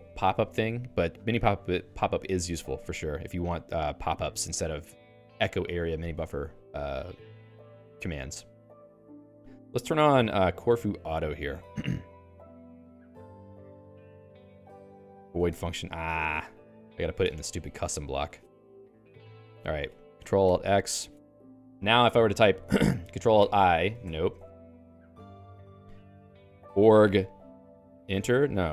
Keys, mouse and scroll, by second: 2.2 j, 3.2 l, 8.6 j, 9.0 x, 11.0 l, 12.6 a, 13.4 Escape, 13.7 k, 15.2 ctrl+g, 15.4 ctrl+g, 15.6 Escape, 18.2 click, 19.6 alt+/, 20.4 ctrl+alt+x, 26.2-27.5 typing, 27.6 Return.